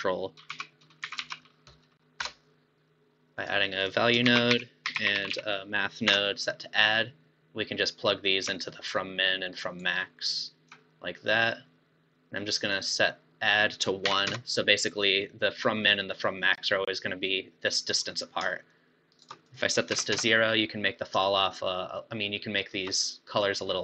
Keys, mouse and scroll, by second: 3.8 click, 4.3 shift+a, 8.7-13.1 alt+right drag, 13.4-16.4 drag, 18.7 shift+click, 19.4-22.7 drag.